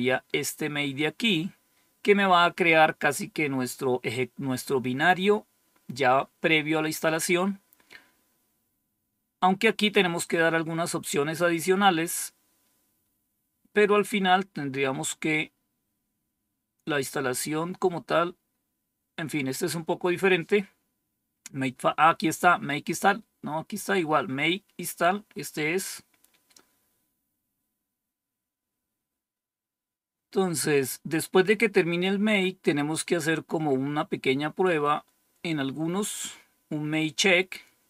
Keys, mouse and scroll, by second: 7.2-7.7 scroll down 1, 7.7-8.4 scroll down 1, 11.5-12.3 scroll down 1, 13.0-14.7 scroll down 3, 14.7 scroll down 1, 19.5-20.4 scroll up 2, 20.4-21.0 scroll up 1, 21.0-24.4 scroll up 1, 24.4-25.6 scroll up 1, 25.6-27.4 scroll up 1, 27.4-31.8 scroll up 1, 31.8-32.5 scroll down 2, 33.0-33.7 scroll down 2.